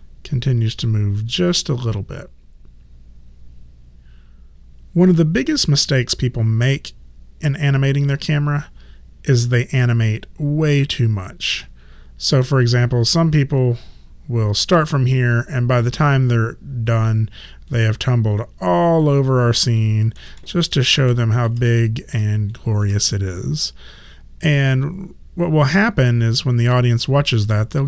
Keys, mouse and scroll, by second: 13.8 click, 16.9 click, 17.7 alt+click, 19.3 alt+right click, 19.8 alt+click, 20.5 alt+click, 21.2 alt+click, 21.8 alt+click, 22.5 alt+click.